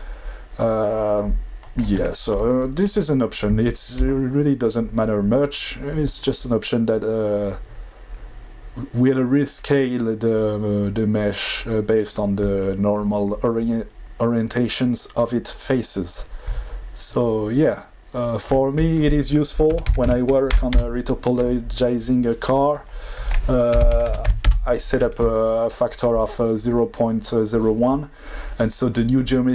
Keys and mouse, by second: 4.0-17.1 shift+drag, 17.3-18.5 shift+drag, 18.7-20.7 drag, 23.3-24.4 drag.